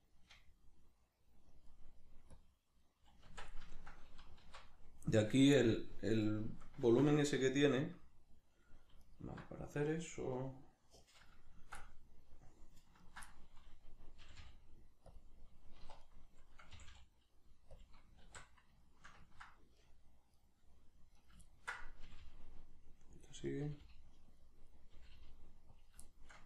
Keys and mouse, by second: 0.0-2.3 shift+middle drag, 2.3 click, 2.8-9.0 middle drag, 3.3 Tab, 4.5 alt+q, 9.0 alt+right click, 11.0 right click, 11.8-13.1 middle drag, 13.1 ctrl+right click, 13.3 middle click, 14.2 g, 15.1 click, 15.8 1, 16.1 right click, 16.7 g, 17.8 click, 18.3 alt+q, 18.8-19.8 shift+middle drag, 19.8 right click, 20.3 right click, 21.2 right click, 21.5-23.3 ctrl+middle drag, 22.1 g, 23.3 click, 23.5 right click, 23.7 g, 24.4 click, 24.7 right click, 24.9 g, 25.8 click, 26.1-26.4 shift+middle drag.